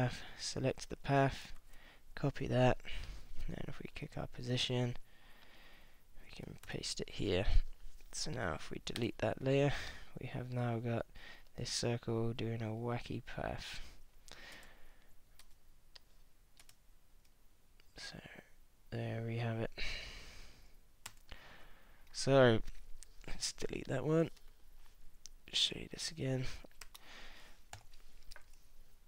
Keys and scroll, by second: 1.6 super+c, 3.9 p, 6.7 super+v, 9.0 BackSpace, 14.5 space, 16.6 space, 21.1 space, 24.4 BackSpace, 27.0 super+Left, 27.8 super+n, 28.3 n.